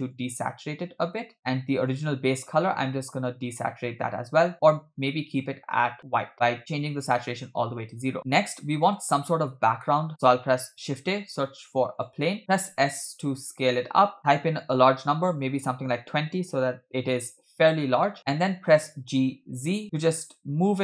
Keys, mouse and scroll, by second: 1.4 middle click, 1.4-1.9 scroll down 1, 1.9 click, 8.2-9.0 middle drag, 9.8 middle click, 10.6 shift+a, 12.7 s, 16.6-17.5 scroll down 2, 17.5-18.0 scroll down 2, 18.1-18.7 scroll up 1, 18.7 scroll up 2, 18.7 g.